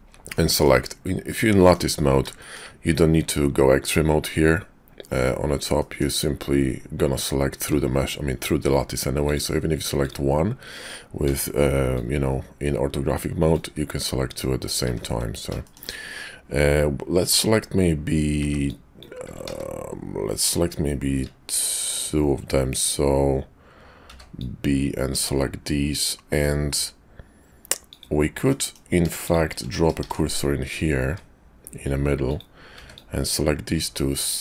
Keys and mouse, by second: 0.3 middle click, 1.3 middle click, 2.4 shift+middle click, 5.7 middle click, 9.1 click, 9.9 click, 11.2 b, 13.9 middle click, 15.6 shift+middle click, 18.4 g, 19.4 ctrl+z, 24.0 b, 27.7 click, 28.5 middle click, 30.0 shift+s, 31.0 `, 32.1 click, 32.7 b, 34.2-34.4 drag.